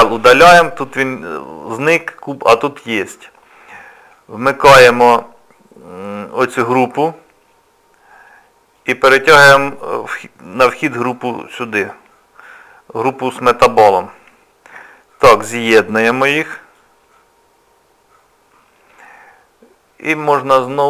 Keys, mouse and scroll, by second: 4.4 click, 8.8 click, 13.9-14.2 scroll up 2, 14.9-15.2 scroll up 2, 15.3 click.